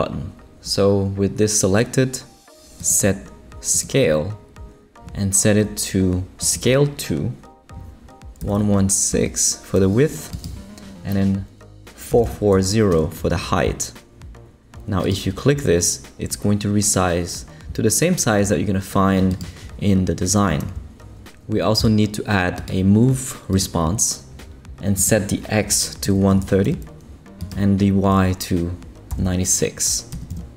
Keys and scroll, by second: 8.4 l, 9.1 6, 12.1 4, 12.5 0, 12.9 Return, 25.8-26.9 typing, 29.1 9, 30.1 6, 30.3 Return.